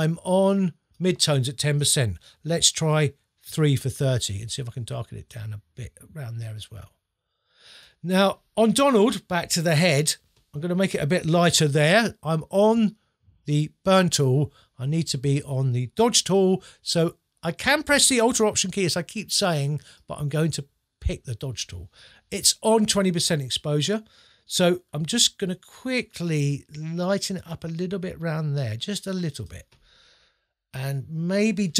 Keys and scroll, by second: 3.5 3.